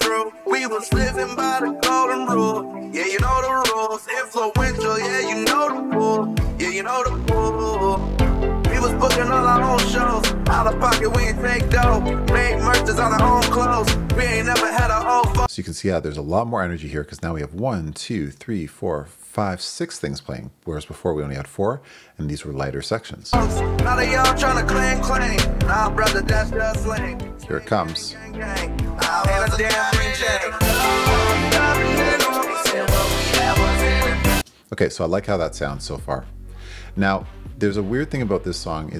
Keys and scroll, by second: 15.4 space, 23.2 space, 34.4 space.